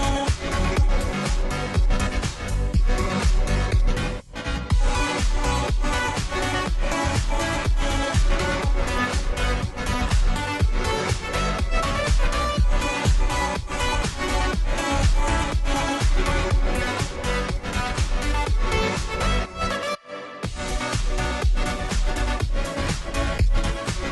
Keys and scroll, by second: 15.9-17.3 typing, 21.3-22.9 typing, 22.9 Return.